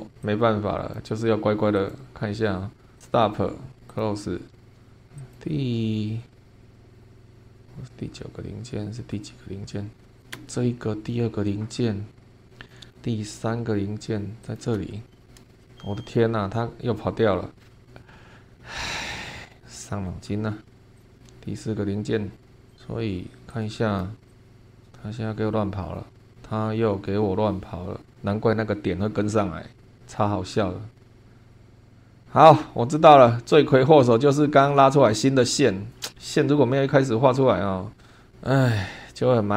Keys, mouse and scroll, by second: 0.2-1.1 drag, 1.7 click, 3.0 click, 3.9 click, 4.5 scroll up 1, 4.9 scroll down 1, 5.1 click, 5.8 scroll down 1, 7.0 scroll up 1, 7.4 space, 7.9-8.4 scroll up 2, 10.0 scroll down 1, 10.2 click, 10.3 space, 11.1 scroll down 2, 12.6 click, 14.4 click, 14.7 space, 15.2 scroll down 2, 15.5 shift+middle click, 15.6-16.5 shift+scroll up 5, 17.3 scroll down 2, 18.1 scroll up 2, 19.0 scroll down 2, 19.5-20.6 scroll down 2, 20.6 scroll down 1, 21.0 click, 21.1-21.7 scroll down 3, 21.7-22.1 scroll up 1, 22.3 scroll up 1, 22.7 click, 23.5-24.2 drag, 24.3 click.